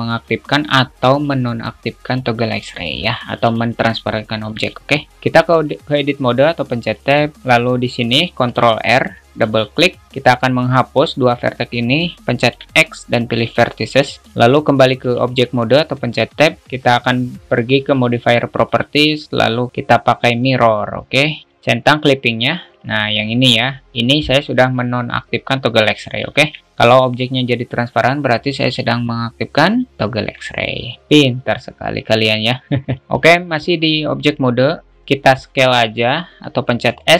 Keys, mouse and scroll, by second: 10.6-11.6 drag, 18.0 click, 18.9-20.7 drag, 22.2 drag, 22.9 alt+z, 26.8 alt+z.